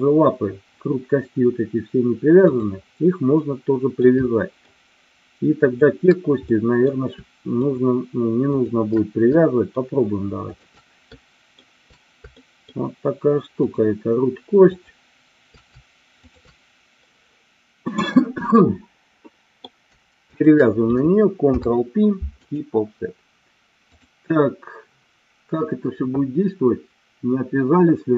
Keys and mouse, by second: 3.5 middle click, 4.3 shift+middle click, 6.6 middle click, 7.6 shift+click, 8.6 shift+click, 9.4 shift+middle click, 10.4 shift+click, 11.2 shift+middle click, 12.3 shift+middle click, 13.7 shift+click, 14.7 shift+click, 18.6-19.8 middle drag, 20.3 shift+click, 21.6 ctrl+p, 23.9-28.1 drag.